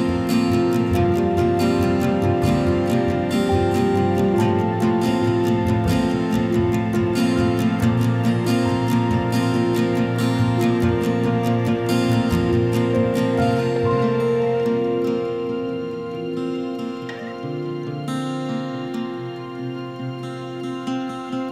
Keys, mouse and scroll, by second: 3.4 click, 8.1 click, 10.0 click, 13.7 click, 14.9 middle click, 15.0 middle click, 18.0 click, 18.7 click, 20.2 right click.